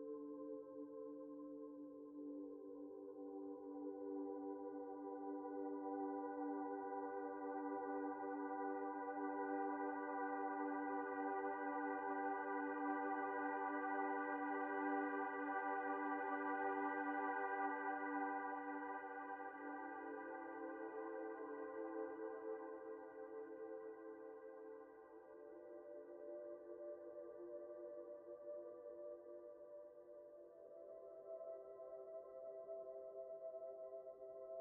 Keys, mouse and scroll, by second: 0.6 scroll down 1, 0.9 middle click, 5.8 shift+middle click, 10.5 middle click, 10.8 scroll up 1, 12.0 middle click, 12.2-13.3 scroll down 1, 22.4 ctrl+l, 25.8 ctrl+l, 27.9-28.5 scroll up 1, 28.6 shift+middle click, 28.9 scroll up 1, 29.2 shift+middle click, 29.4-30.4 shift+scroll down 1, 34.3 typing.